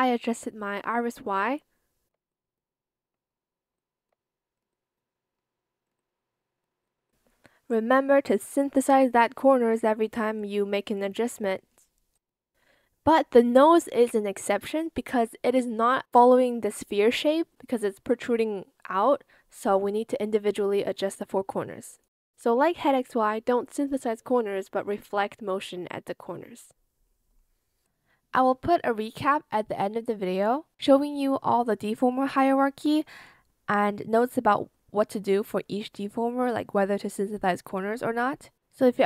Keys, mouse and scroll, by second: 1.6 shift+click, 3.7 shift+click, 10.2 Return, 13.5 ctrl+z, 15.3 Escape, 16.8 ctrl+z, 22.5 Return, 29.9 ctrl+z, 35.3 Return, 36.0 Escape.